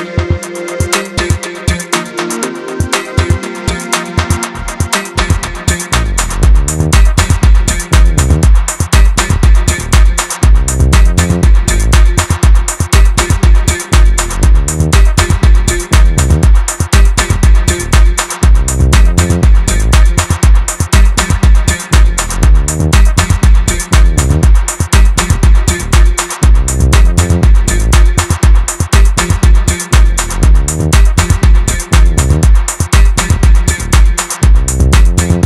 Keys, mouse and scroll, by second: 4.7-5.3 scroll up 2, 5.3-6.5 shift+middle drag, 6.5 click, 7.6-8.4 scroll down 1, 8.4 ctrl+shift+click, 12.7 right click, 13.2-15.3 middle drag, 15.3 click, 16.5 ctrl+shift+click, 17.4-20.6 right drag, 20.6 click, 21.7 ctrl+shift+click, 22.2-25.2 right drag, 25.2 click, 26.3 ctrl+shift+click, 26.8-29.8 right drag, 29.8 click, 31.1 ctrl+shift+click, 31.7-33.7 right drag, 33.7 KP_1, 34.0-34.5 scroll down 2, 34.5 Tab, 34.7-35.1 scroll up 1, 35.1-35.4 middle drag.